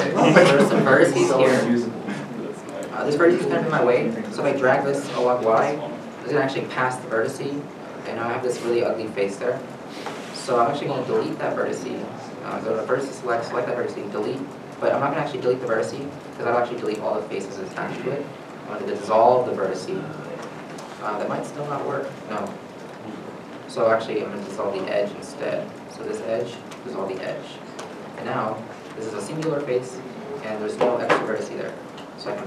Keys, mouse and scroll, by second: 1.6 1, 2.2 middle click, 2.8 scroll up 1, 4.9 g, 5.1 y, 7.6 middle click, 8.2 middle click, 8.8 shift+middle click, 9.9 ctrl+z, 10.4 middle click, 11.7 x, 12.6 x, 14.3 x, 16.6 x, 16.6 middle click, 18.8 middle click, 18.8 x, 22.5 ctrl+z, 23.2-23.6 scroll up 1, 25.0 x, 28.9 3, 29.0 middle click, 30.1 1, 30.2 middle click.